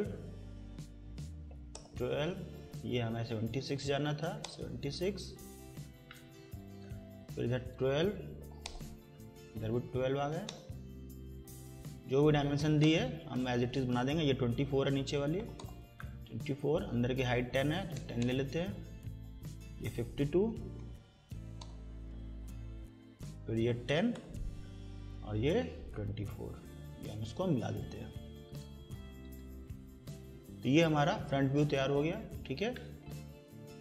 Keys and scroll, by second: 1.1-2.0 typing, 3.8 7, 4.1 6, 4.5 Return, 8.0-10.7 typing, 12.2-13.1 typing, 14.9-15.9 typing, 17.5-18.5 typing, 20.5 5, 20.8 2, 21.6 Return, 23.5-24.4 typing, 29.4 Escape.